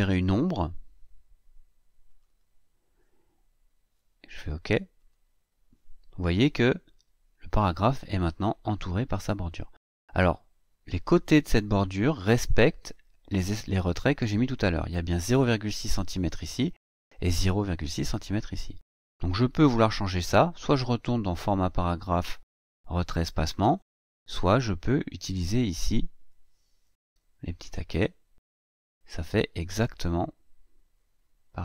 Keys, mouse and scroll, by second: 1.9 click, 4.8 click, 25.5-28.0 drag, 29.6-31.6 drag.